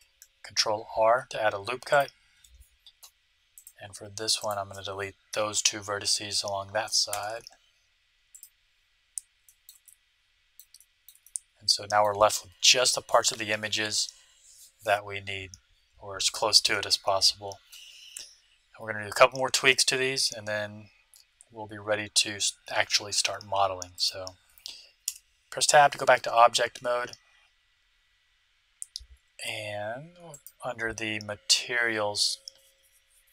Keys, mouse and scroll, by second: 0.4 ctrl+r, 3.5-6.3 right drag, 7.1 x, 9.0-12.9 middle drag, 16.2-18.0 middle drag, 23.9-25.7 right drag, 25.0 Tab, 30.3-32.0 drag.